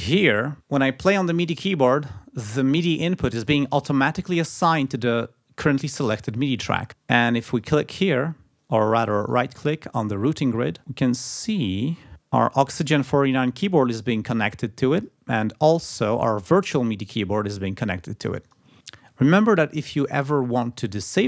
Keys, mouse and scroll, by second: 0.3 click, 7.6 click, 8.5 click, 9.2 right click, 15.0 click, 18.4 click.